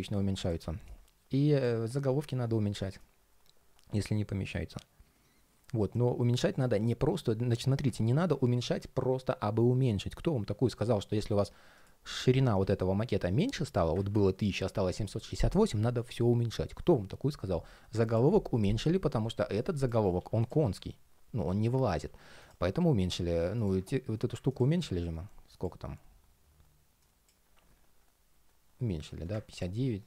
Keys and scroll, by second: 13.7 super+z, 19.9 alt+super+c, 20.3 alt+super+v, 21.6 super+z.